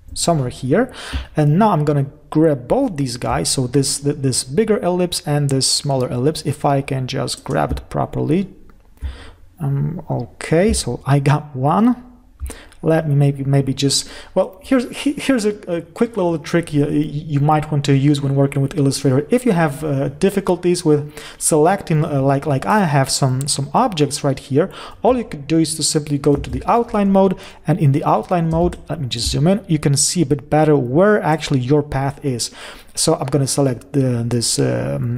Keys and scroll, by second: 0.3 Up, 26.9 ctrl+y, 29.1 ctrl+shift+space.